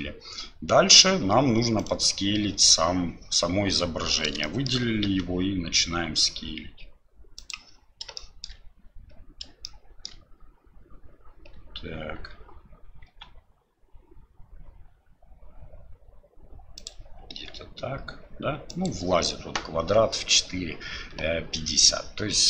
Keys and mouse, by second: 4.5 shift+click, 8.2 shift+drag, 9.6 shift+click.